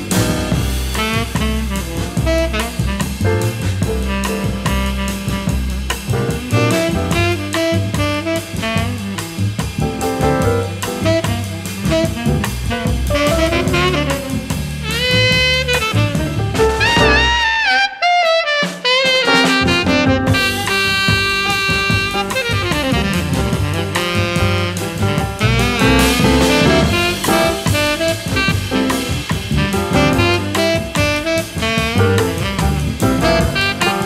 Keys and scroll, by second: 0.7 n, 6.5 alt+super+z, 14.2 v, 14.6 BackSpace, 17.4 a, 22.6 shift+Right, 25.4 shift+Right, 27.8 a.